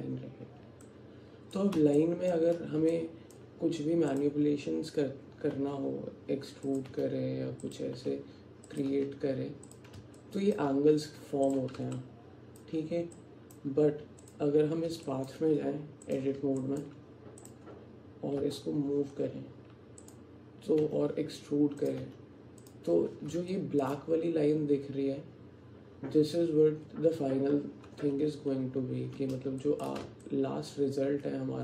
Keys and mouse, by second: 0.9 click, 2.0 shift+click, 3.0 alt+click, 5.6 e, 6.9 e, 8.0 e, 8.9 e, 10.2 alt+click, 11.1 Tab, 12.0 alt+click, 13.2 alt+click, 15.1 middle click, 15.2 alt+click, 15.5 Tab, 16.6 alt+click, 17.5 click, 18.4 g, 20.9 e, 22.0 e, 23.6 alt+shift+click, 29.6 shift+click, 30.3-31.6 drag.